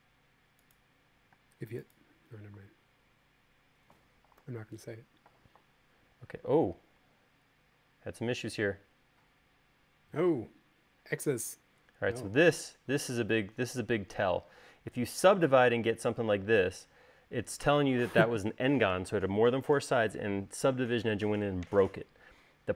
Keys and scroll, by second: 2.1 space, 5.1 u, 7.6 e.